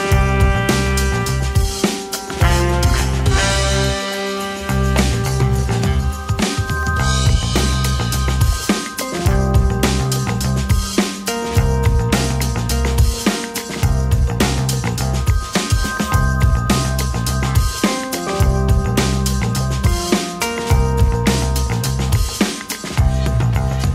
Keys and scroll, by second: 2.7 space, 2.9 3, 4.5 2, 7.6 space, 18.3 space, 19.4 2.